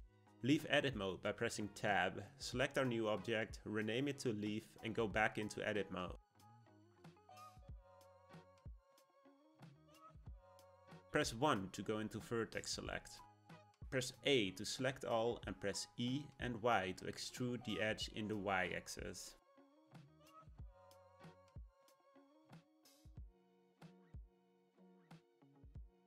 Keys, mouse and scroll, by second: 1.6 click, 1.8-4.8 drag, 6.0 click, 6.3 click, 7.6 Tab, 8.4-9.9 shift+middle drag, 9.9-11.7 scroll up 1, 11.7 1, 14.1 click, 15.8 e, 25.1-26.0 shift+middle drag.